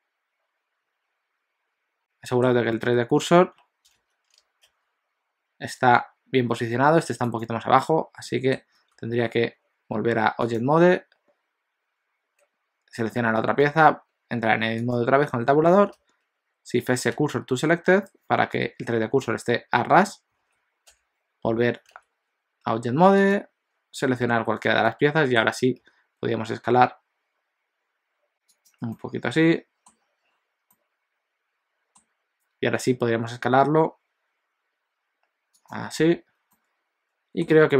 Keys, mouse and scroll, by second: 2.0 middle click, 2.9 KP_1, 3.9 ctrl+z, 4.7 s, 7.8 middle click, 8.9 Tab, 10.6 click, 13.6 Tab, 14.9 click, 16.0 shift+s, 18.5 KP_1, 19.3 alt+z, 20.9 Tab, 22.0 alt+a, 23.2 click, 24.2 Tab, 24.9 middle click, 25.8 s, 28.9 middle click, 33.6 s, 36.0 Tab, 36.6 middle click.